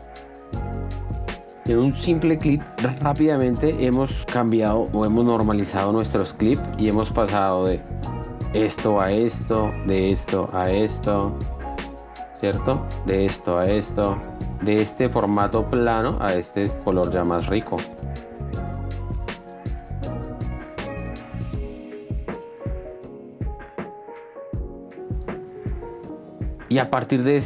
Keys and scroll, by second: 4.2 ctrl+d, 21.9 d.